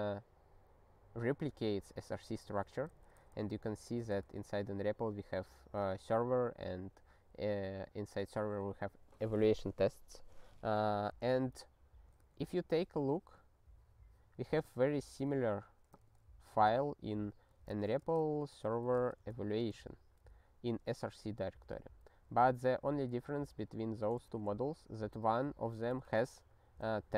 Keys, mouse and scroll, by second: 2.7 ctrl+n, 2.9 ctrl+n, 3.2 ctrl+n, 3.4 Return, 4.1 ctrl+n, 4.2 Return, 13.1-13.5 scroll up 3, 14.4 click, 24.3 alt+<, 25.9 super+b.